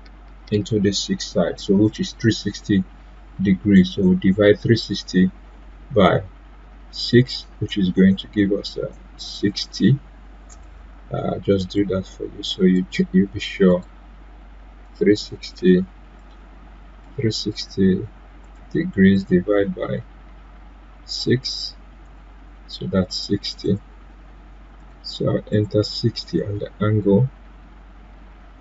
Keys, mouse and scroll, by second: 10.5-18.4 drag.